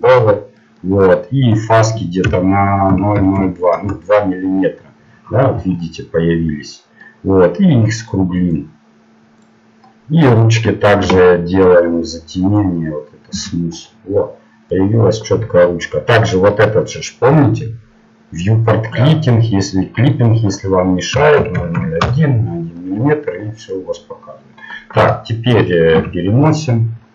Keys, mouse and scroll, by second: 0.0 click, 0.6-3.7 middle drag, 3.7 KP_0, 4.7 middle click, 5.5 z, 8.0-11.4 drag, 9.9-11.4 middle drag, 11.4 t, 12.6-14.4 drag, 13.6 t, 13.8 middle click, 22.0 KP_0, 22.9-24.3 middle drag, 25.0 KP_3, 25.9 KP_1.